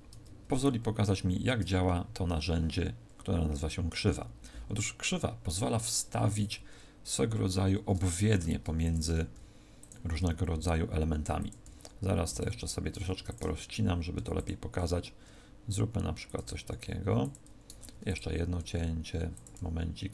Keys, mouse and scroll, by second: 0.4 Tab, 0.4 KP_Decimal, 1.6 Tab, 8.4 ctrl+r, 9.8 click, 10.1 s, 11.4 click, 11.6 s, 12.3 click, 13.0 ctrl+r, 14.4 click, 14.7 s, 16.3 click, 16.6 s, 17.2 click, 17.8 ctrl+r, 19.4 click, 19.5 s.